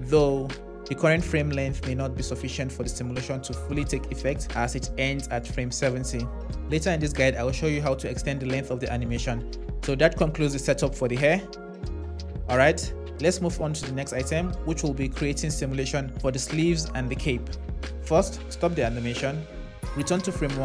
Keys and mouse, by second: 18.6 click.